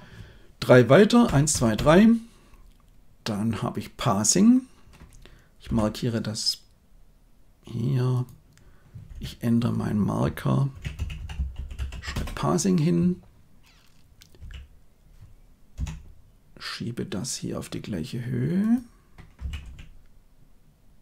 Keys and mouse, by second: 1.2 Right, 1.5 Right, 1.7 Right, 5.6 m, 8.1 click, 9.1 F2, 11.3 s, 14.3 g, 19.3 g.